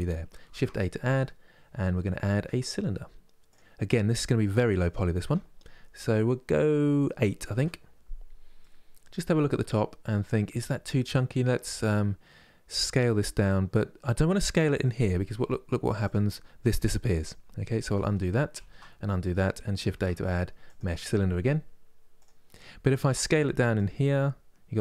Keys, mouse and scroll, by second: 0.2 shift+a, 4.5-7.5 drag, 8.3-11.4 middle drag, 17.7 ctrl+z, 18.2 ctrl+z, 18.7 middle click, 19.6 shift+a, 23.4-24.8 drag.